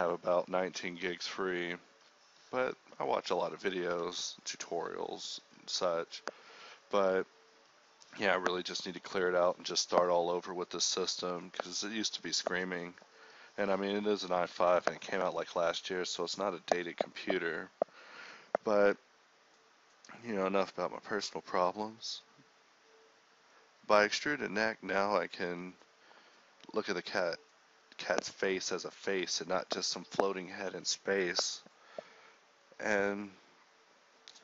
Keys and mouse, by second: 0.8 g, 2.5 g, 3.4 middle click, 3.8 g, 5.5 alt+s, 6.8 g, 7.2 alt+s, 8.4 KP_1, 8.7 Tab, 9.1 a, 9.5 h, 10.1 ctrl+s, 10.9 ctrl+s, 12.9 KP_1, 13.1 a, 18.6 ctrl+1, 19.5 ctrl+1, 20.3 z, 20.4 z, 20.9-21.5 drag, 23.4 ctrl+d, 24.4 z, 24.7 z, 25.2-26.4 drag, 26.4 middle drag, 26.9 click, 27.6-29.4 middle drag, 30.6 ctrl+z.